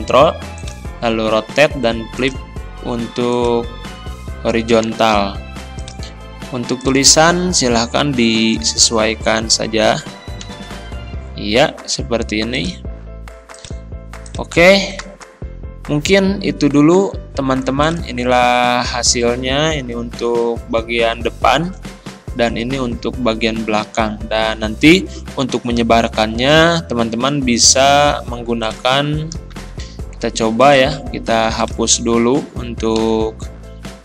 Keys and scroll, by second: 10.5 ctrl+[, 20.1 shift+F5, 22.8 Right, 25.4 Escape, 29.7 Escape, 33.0 Delete.